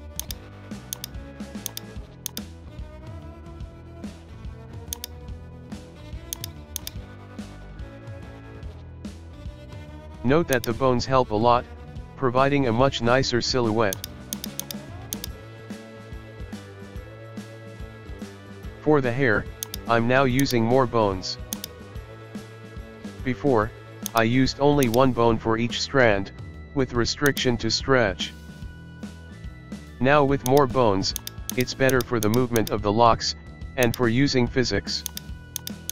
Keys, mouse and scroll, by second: 0.3-1.0 drag, 1.8 right click, 2.5-3.6 drag, 3.6 shift+middle click, 3.7 scroll, 5.1 right click, 5.7 r, 6.9 right click, 7.2 r, 10.8 scroll down 1, 11.0-12.2 middle drag, 12.2 scroll down 1, 12.5-14.0 shift+middle drag, 14.0 right click, 14.4 right click, 14.6 right click, 15.3 right click, 16.1 alt+g, 16.8-17.1 shift+middle drag, 17.1 KP_1, 17.3 scroll down 1, 17.4-18.2 shift+middle drag, 19.8 shift+click, 20.6 shift+click, 21.7 click, 23.2 a, 24.3 click, 24.8-26.3 drag, 27.4 shift+click, 28.0-29.1 middle drag, 29.1 scroll up 1, 29.4-30.7 middle drag, 30.7 right click, 31.4 shift+Right, 31.7 shift+Right, 31.7 right click, 32.1 shift+Right, 32.4 shift+Right, 32.8 shift+right click, 32.9-34.1 shift+middle drag, 34.1 shift+right click, 34.2-35.3 shift+middle drag, 35.3 shift+right click, 35.8 shift+right click.